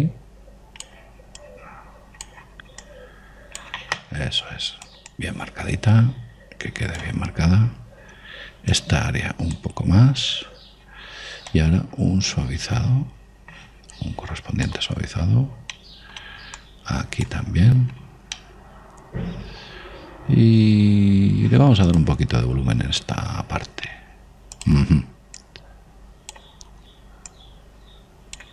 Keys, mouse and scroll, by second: 1.0-8.1 drag, 8.7 middle click, 10.0 click, 11.8-13.7 middle drag, 12.7 click, 16.4-16.9 scroll up 1, 16.9-18.6 middle drag, 17.8 click, 19.5-21.3 middle drag, 23.0 click, 26.7-28.5 drag, 27.9 middle click.